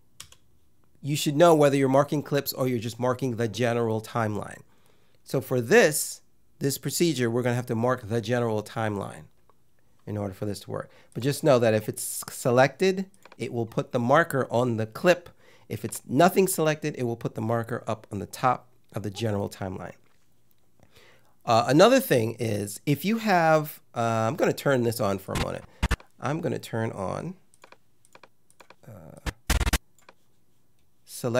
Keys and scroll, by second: 0.2 super+z.